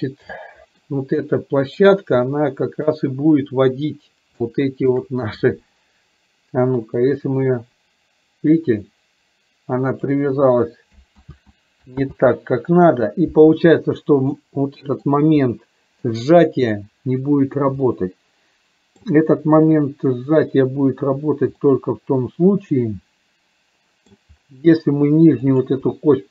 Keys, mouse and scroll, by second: 0.3 scroll up 2, 0.6 middle click, 2.3-2.9 middle drag, 4.4-5.1 shift+middle drag, 7.1-10.1 drag, 11.3 ctrl+z, 12.2 ctrl+z, 14.4-15.2 middle drag, 15.4-16.2 middle drag, 17.9-19.2 middle drag, 21.7-24.2 middle drag.